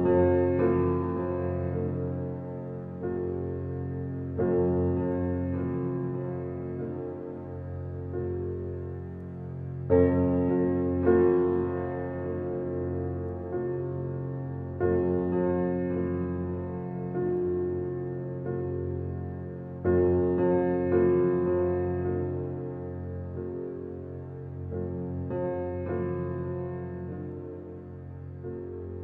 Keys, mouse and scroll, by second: 0.3 Tab, 0.7-1.2 middle drag, 1.2 scroll down 3, 1.5-4.6 middle drag, 4.6 click, 4.8 scroll down 1, 5.1-6.0 middle drag, 6.0 scroll up 4, 7.0 Tab, 7.6 Tab, 7.8 click, 7.9 Tab, 8.5 middle click, 9.0 click, 10.1 l, 11.0 click, 11.5 click, 12.2 l, 12.7 click, 13.2 l, 13.6 click, 13.8 l, 14.4 l, 15.4 click, 15.9-17.1 middle drag, 17.1 alt+z, 17.6 click, 19.4 click, 20.9 click, 21.2 click, 21.7 click, 23.3 click, 23.8 click, 25.1 click, 25.5 click, 26.9 click, 28.2 click, 28.7 click.